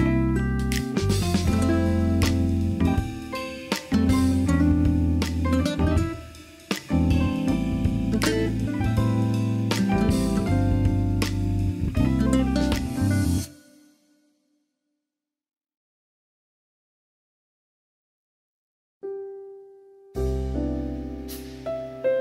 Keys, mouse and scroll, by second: 0.2 z, 5.2 KP_3, 7.2 e, 9.5 Tab, 9.5 Tab, 9.8 Tab, 10.1 middle drag, 10.4 alt+z, 11.8 click, 12.1-13.0 middle drag, 14.3 ctrl+s, 15.3-16.0 drag, 16.9-17.5 drag, 17.5 KP_1, 18.7 Tab, 19.1 alt+z.